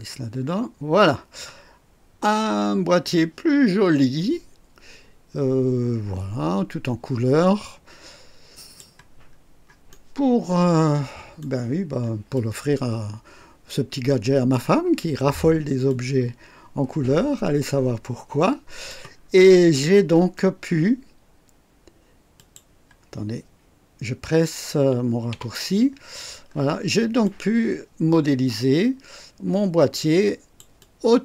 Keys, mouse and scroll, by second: 1.7 scroll up 2, 3.0-8.9 drag, 9.2 scroll up 2, 9.8-11.6 right drag, 11.7 scroll down 2, 12.3-14.7 drag, 15.2 scroll up 1, 15.8-19.0 drag, 19.1 scroll down 2, 19.7 right click, 22.3 click, 25.3 &, 26.4 scroll up 1, 27.2-30.7 drag, 30.9 click.